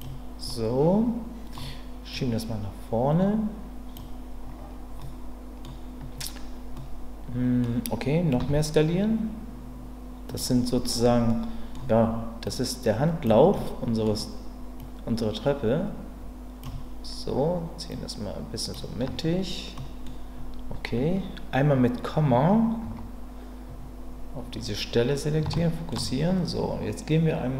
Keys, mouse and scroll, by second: 0.5-1.5 middle drag, 2.1-3.9 drag, 5.0 middle click, 6.8 middle click, 8.4 s, 10.3 click, 11.3 middle click, 12.4 click, 13.5 middle click, 14.8-16.6 drag, 17.9 click, 19.8 middle click, 22.8 KP_Decimal, 25.5 shift+middle click.